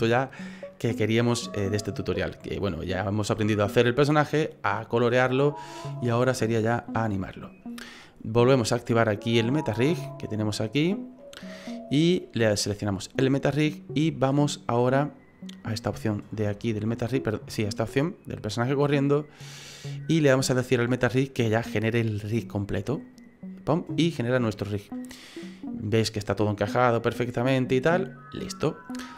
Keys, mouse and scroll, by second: 2.1 middle click, 7.1 middle click, 9.5 click, 10.2 middle click, 11.2 middle click, 12.4 right click, 15.7 click, 16.8-17.5 scroll down 4, 17.5-18.7 scroll down 3, 23.1 click.